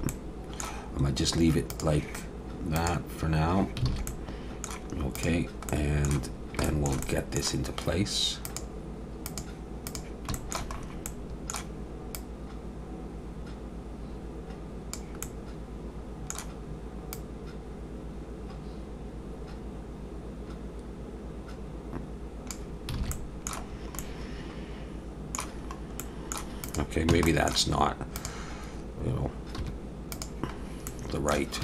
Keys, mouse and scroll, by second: 0.1 middle click, 0.9-1.3 scroll up 2, 1.7 click, 2.7 click, 3.9 alt+a, 4.1 middle click, 5.1 click, 5.7 middle click, 6.2-6.6 scroll down 2, 6.6 shift+middle click, 7.0 middle click, 7.5 scroll down 1, 8.4 click, 10.3 shift+middle click, 10.8 scroll up 2, 11.1 middle click, 12.1 click, 15.2 middle click, 17.1 click, 23.0 alt+a, 23.1 middle click, 23.7-24.0 scroll down 2, 24.0 middle click, 25.6-26.0 scroll up 2, 26.0 middle click, 26.6 click, 27.1 Tab, 27.3 middle click, 28.2 click, 29.6 1, 30.1 click, 30.5-30.9 scroll down 2, 30.9 middle click.